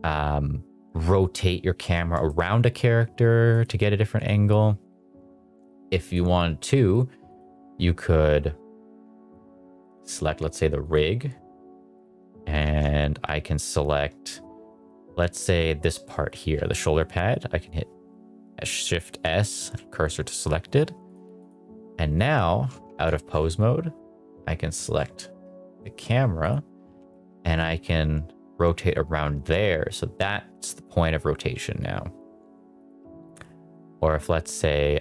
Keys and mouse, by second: 2.3 shift+middle click, 3.5 click, 4.1 click, 6.0 click, 7.2 click, 9.9 click, 10.8 click, 11.9 click, 12.7 ctrl+Tab, 14.8 click, 16.5 shift+s, 21.0 click, 21.4 click, 23.0 ctrl+Tab, 24.7 click, 26.4 click, 26.8 r, 27.1 z, 32.8 click.